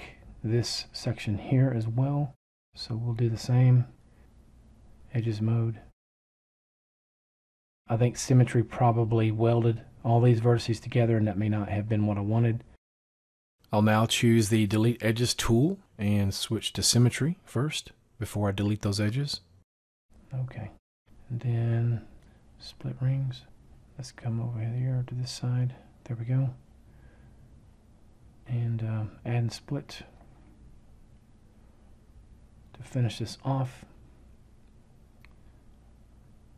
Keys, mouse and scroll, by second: 30.9 [.